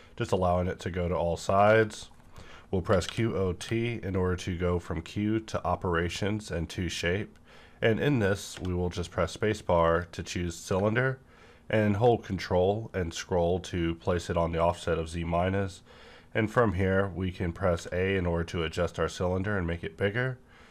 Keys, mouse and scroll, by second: 1.7 click, 1.9 scroll down 1, 2.8-3.6 typing, 8.5 typing, 9.7 click, 11.1 scroll down 1, 17.7-19.9 scroll down 1, 17.7 a.